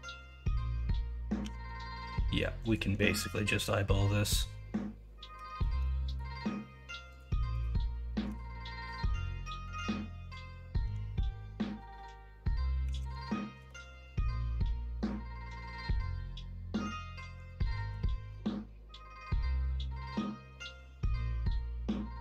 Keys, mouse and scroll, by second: 1.4 g, 5.3 2, 12.8 s, 16.1-17.4 middle drag, 17.7 shift+middle click, 17.9 scroll down 1, 18.2 alt+z, 18.4-21.5 middle drag.